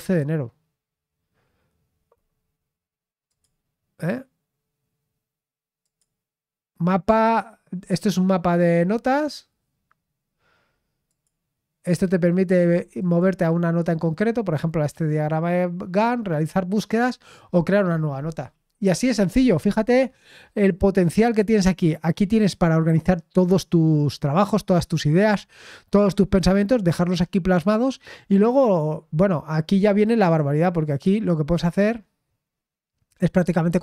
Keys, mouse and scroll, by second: 3.2 click, 5.8 click, 11.0 click, 12.9 click, 30.2 click, 31.4 click.